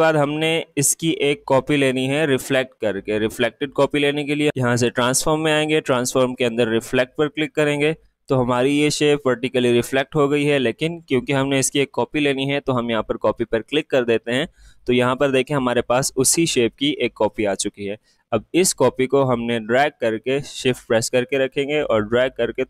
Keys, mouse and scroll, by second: 4.1 click, 4.8 click, 13.2 click, 17.8-22.6 drag.